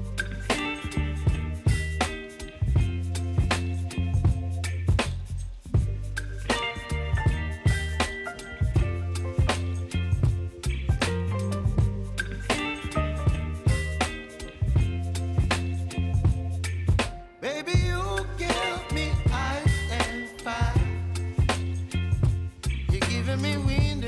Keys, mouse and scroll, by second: 0.0-1.6 typing, 2.4 click, 13.0 click, 13.9 shift+click, 17.7 shift+Num_Lock, 18.1 shift+click.